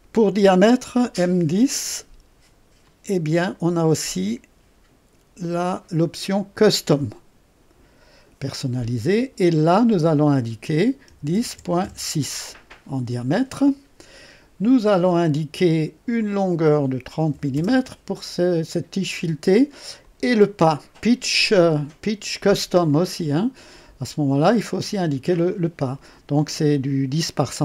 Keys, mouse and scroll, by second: 1.7 click, 2.8 click, 6.5 click, 9.6 click, 11.0 KP_1, 11.3 KP_0, 11.5 KP_Decimal, 11.8 KP_6, 16.1 click, 17.5 KP_0, 20.0 click, 22.8 click, 24.7 click.